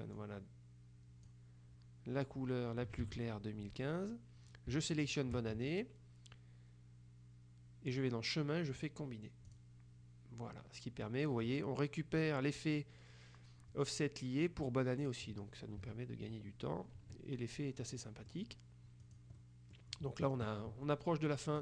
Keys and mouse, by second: 3.1 ctrl+z, 5.0 shift+click, 8.0 click, 9.6 click, 15.9 KP_Subtract, 17.1 KP_Subtract, 18.0 click, 19.2 click.